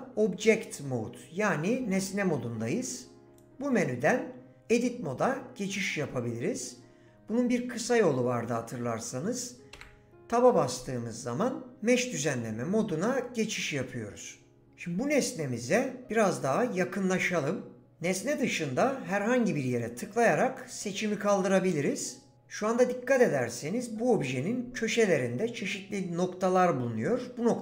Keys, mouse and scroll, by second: 3.3-5.9 drag, 9.7 Tab, 19.8 click.